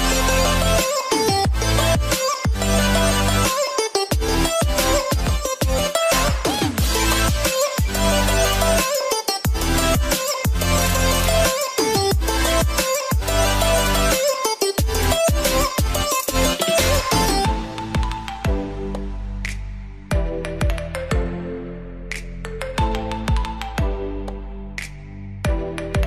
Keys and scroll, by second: 24.2 [.